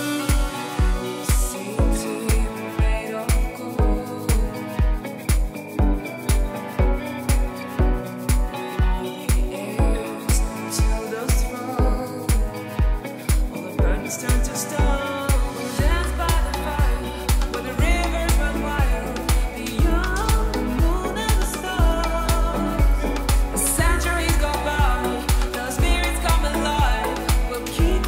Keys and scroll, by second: 2.3 [, 3.7 space, 4.0 [, 4.8 ], 7.0 ], 11.1 space, 11.5 space, 12.3 space, 12.9 [, 14.2 space, 17.2 ], 17.8 ], 18.9 [, 20.3 space, 20.5 space, 23.8 super+d.